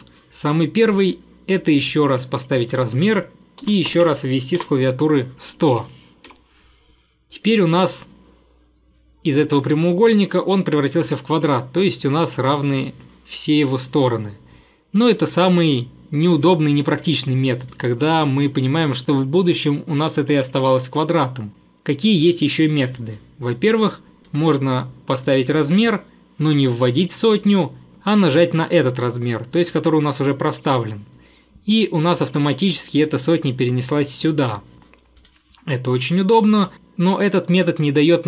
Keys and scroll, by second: 3.4-4.6 typing, 4.6 Return, 6.3 Escape, 15.7 Delete.